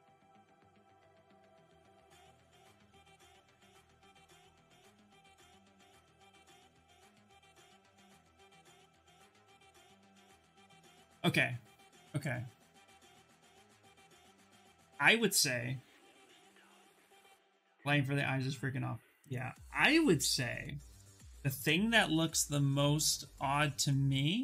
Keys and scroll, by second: 0.0-1.0 typing.